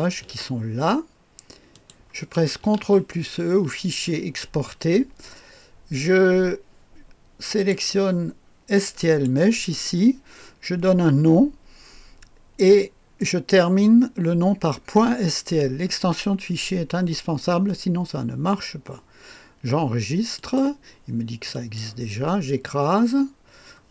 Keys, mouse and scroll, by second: 1.8 ctrl+click, 4.1 ctrl+e, 7.5 click, 9.1 click, 20.4 click, 21.5 click.